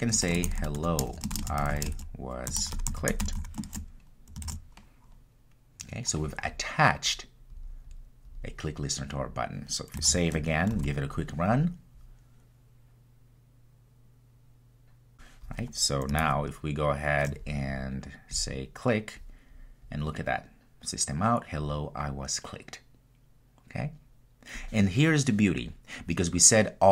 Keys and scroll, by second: 4.5 super+s, 7.6 super+s, 10.6 super+s, 11.7 ctrl+r.